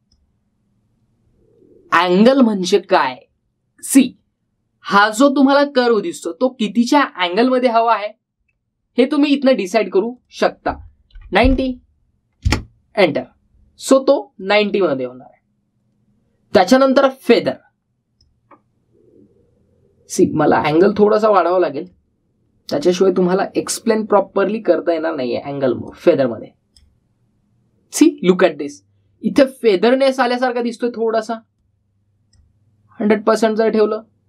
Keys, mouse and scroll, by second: 0.0-1.2 drag, 11.0 click, 15.2 click, 18.2-19.1 drag, 21.7-22.9 drag, 24.0-25.8 scroll up 1, 26.7-27.7 drag, 32.5-33.3 drag.